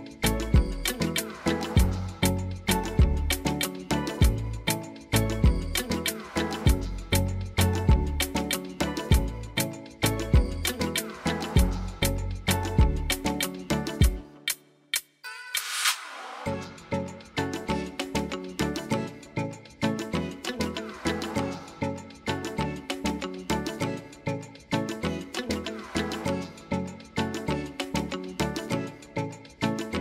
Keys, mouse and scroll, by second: 5.3 click, 6.7 click, 7.1 click, 10.2 click, 13.2 click, 17.0 click, 20.7 click, 25.0 click, 28.3 click.